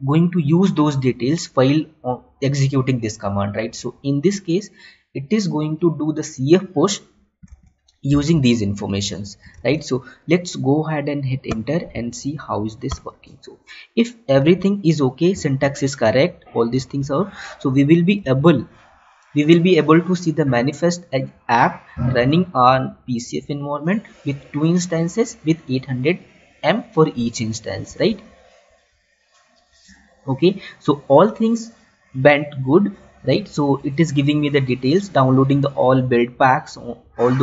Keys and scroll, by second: 8.1 Tab, 10.0 Tab, 15.0 Tab, 17.2 alt+Tab, 18.8 Tab, 28.3 alt+Tab.